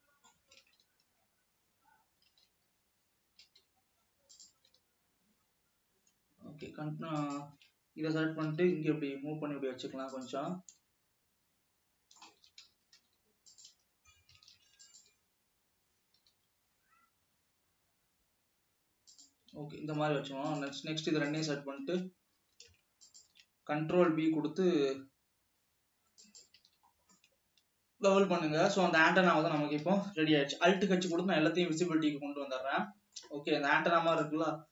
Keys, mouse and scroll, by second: 1.1 ctrl+z, 2.9 ctrl+z, 4.1 ctrl+z, 4.6 click, 5.2 ctrl+z, 7.4 alt+shift+click, 8.8 g, 10.9-12.7 middle drag, 12.7 alt+a, 13.3 ctrl+r, 14.7 alt+a, 15.1 alt+click, 16.4 g, 20.0 alt+a, 20.8 alt+shift+click, 21.5 alt+shift+click, 22.7 ctrl+z, 23.3 alt+shift+click, 24.4 ctrl+b, 26.9 alt+a, 27.2 scroll down 1, 27.3-29.2 middle drag, 29.2 Tab, 29.8 Tab, 30.9 alt+h, 31.8 alt+a, 32.1 scroll down 1, 32.3-34.7 middle drag.